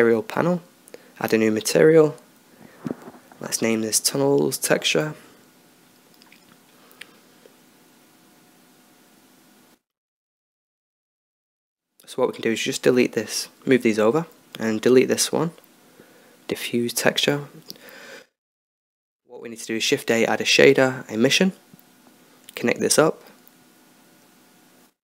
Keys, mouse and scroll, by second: 2.7 click, 3.6 n, 12.4-16.2 drag, 16.3 x, 16.9 shift+a, 22.9-24.5 drag.